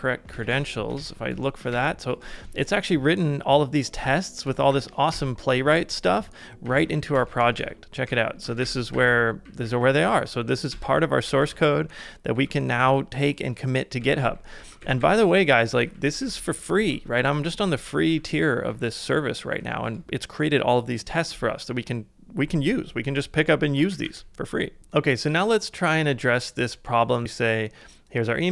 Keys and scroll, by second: 0.1-1.1 typing, 1.7 Up, 4.7 Down, 5.1 Return, 6.4-8.1 typing, 8.6 ctrl+w, 8.9 ctrl+w, 9.1-11.3 typing, 11.9 ctrl+d, 12.3 ctrl+d, 12.7 ctrl+d, 15.7 ctrl+u, 16.1 ctrl+u, 18.7 ctrl+u, 23.7 typing.